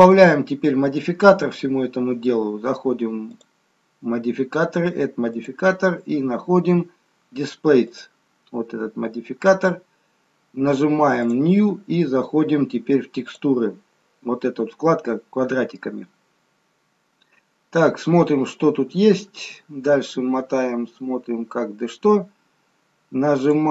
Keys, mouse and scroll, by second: 0.1 middle click, 1.2-3.1 scroll up 2, 3.4 click, 5.2 click, 11.2 click, 13.3 click, 19.6-20.1 scroll down 1, 20.6-23.0 scroll down 2, 23.0-23.4 scroll up 1, 23.4 click.